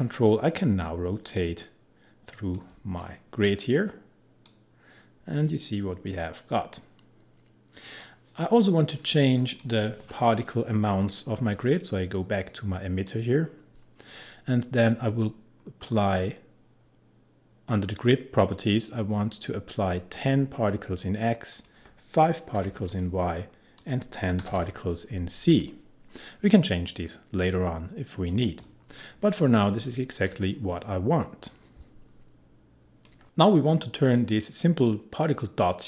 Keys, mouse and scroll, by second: 0.2-3.0 drag, 3.0-3.6 scroll down 1, 4.5-13.0 drag, 15.5-17.4 scroll down 1, 21.5 click, 22.6 5, 22.9 click, 24.2-25.0 typing, 25.5 click, 30.3-33.2 drag.